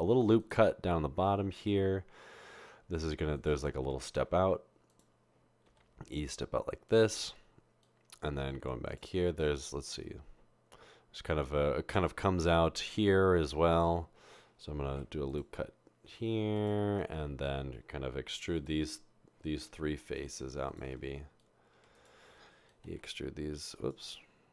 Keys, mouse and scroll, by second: 15.0 ctrl+r, 21.0 typing, 22.8 typing.